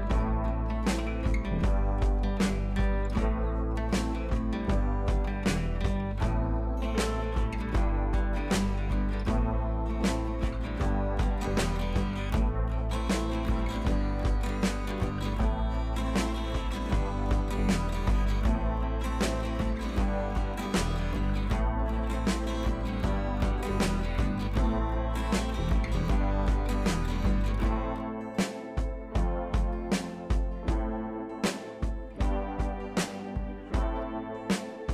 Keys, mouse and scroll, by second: 8.3 ctrl+right click, 8.9 ctrl+click, 10.4 right click, 10.7 click, 12.5 right click, 13.2 click, 14.5 Up, 16.2 Right, 16.8 right click, 17.7-20.9 drag, 21.5-22.5 scroll up 1, 22.8-23.2 shift+click, 24.1 c, 24.4 click, 25.1 Down, 25.6-26.4 scroll down 1, 26.4-28.5 drag, 29.7-30.7 shift+drag, 31.0 Right, 32.8-33.6 scroll up 2, 33.8-34.6 shift+drag.